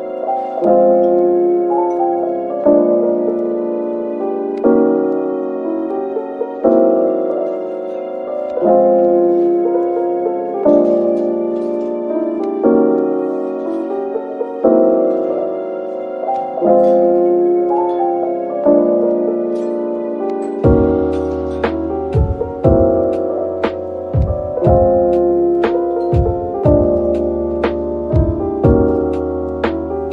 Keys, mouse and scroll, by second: 7.3-8.9 scroll down 1, 12.4 scroll down 1, 13.2-15.7 scroll up 1, 15.7 scroll down 1, 19.4 double click, 25.2 double click, 26.9-27.8 typing.